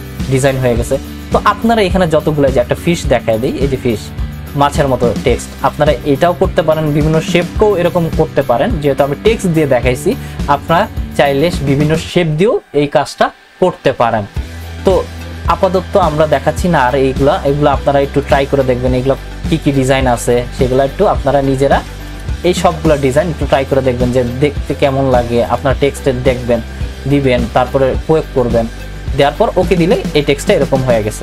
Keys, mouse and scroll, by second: 0.8 click, 3.3 click, 16.3 click, 25.4 click, 27.7-29.6 drag.